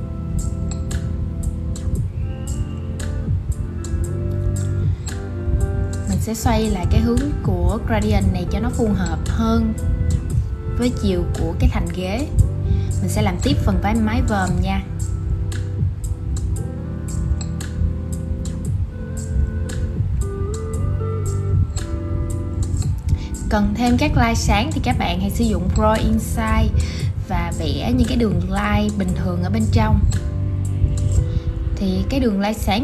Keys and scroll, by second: 21.0 super+c, 22.9 shift+super+v, 30.5 super+z.